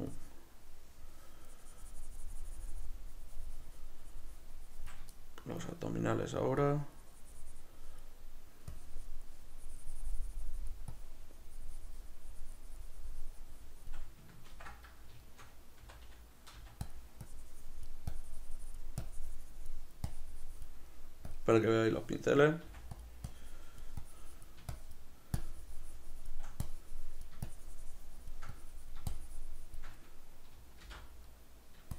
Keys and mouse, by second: 5.3-6.7 shift+middle drag, 6.7-15.3 drag, 14.7 ctrl+i, 15.3-17.0 shift+middle drag, 15.9 c, 17.3-21.4 drag, 22.7 f, 23.4-31.4 drag, 31.0 alt+m, 31.4 middle click.